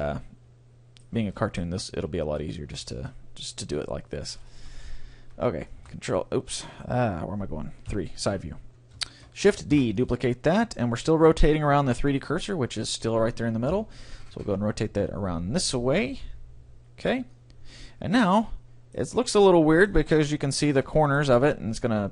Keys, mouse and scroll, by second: 0.0 middle click, 1.2 a, 2.9 Tab, 3.8-4.8 middle drag, 3.8-5.7 right drag, 5.0 ctrl+;, 5.8 ctrl+l, 7.9 KP_3, 8.5-9.8 middle drag, 9.8 shift+d, 13.7 r, 15.3 p, 15.5 r, 17.3-19.2 drag, 17.9-20.3 middle drag, 21.0-22.1 middle drag.